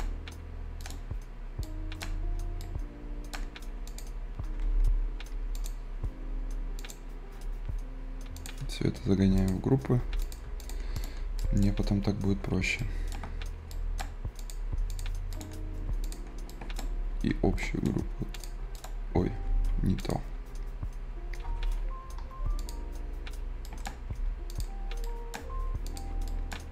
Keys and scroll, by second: 1.4 Escape.